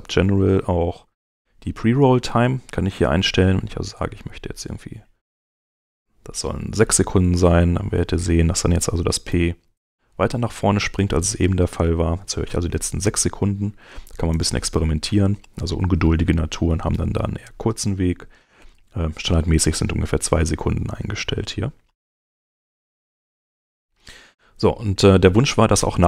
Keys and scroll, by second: 9.0 p, 14.0 Return, 16.6 shift+,, 25.4 Home.